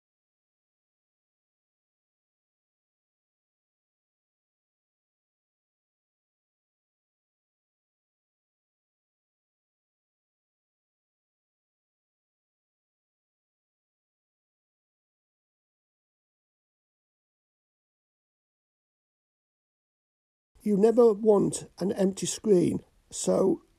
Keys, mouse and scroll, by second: 0.7 click, 5.5 click, 5.9-11.3 drag, 12.4 click, 12.6 click, 14.6-19.4 drag, 20.5 click, 21.2 click, 23.1-23.7 drag.